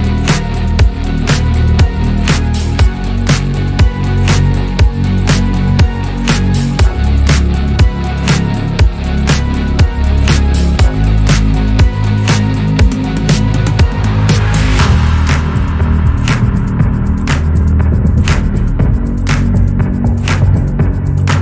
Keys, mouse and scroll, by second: 0.7 click, 1.8 shift+s, 4.0 drag, 4.5 click, 5.1 shift+d, 6.8 shift+s, 9.8-10.1 shift+middle drag, 10.1 click, 10.5 click, 11.0 shift+s, 12.2 shift+middle drag, 12.5-13.0 scroll up 1, 13.0 s, 14.9 click, 15.2 scroll down 1, 15.4 shift+middle click, 15.9 click, 16.6 shift+d, 17.8 r, 18.5 g.